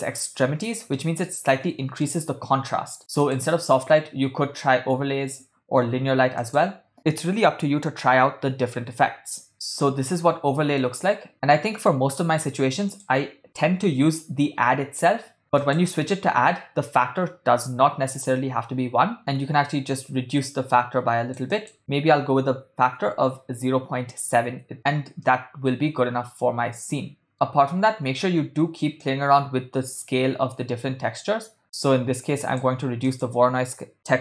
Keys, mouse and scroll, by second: 1.0-2.2 middle drag, 3.2-6.8 drag, 9.5-12.3 middle drag, 13.0-16.0 drag, 19.2-24.5 drag, 25.3-27.3 middle drag, 27.9 middle click, 29.0-32.9 drag, 33.2-34.2 drag.